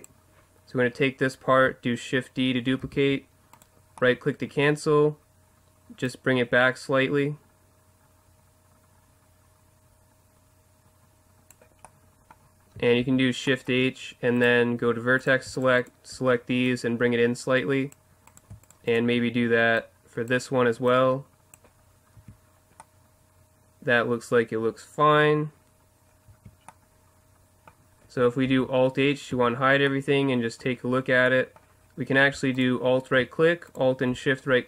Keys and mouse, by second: 2.8 shift+d, 3.7-4.0 right drag, 6.0 click, 11.8 middle drag, 12.4 middle click, 13.0 shift+h, 14.4 click, 15.2 right click, 16.1-17.6 right drag, 16.7-18.3 drag, 18.6-19.7 right drag, 20.9 click, 22.2 Tab, 22.2 click, 22.9 middle click, 23.0 middle click, 26.1 middle click, 26.3 Tab, 28.4 alt+h, 29.3 a, 32.6-34.6 right drag.